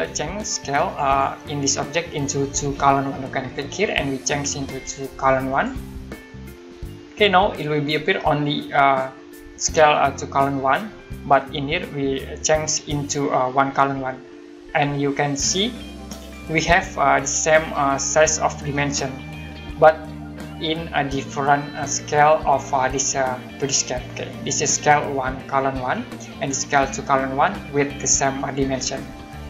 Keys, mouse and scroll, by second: 0.9 click, 3.5 click, 5.5 click, 14.3 middle click, 16.0 click, 18.5 scroll up 1, 24.1-25.2 scroll down 1, 27.8-28.9 scroll up 1.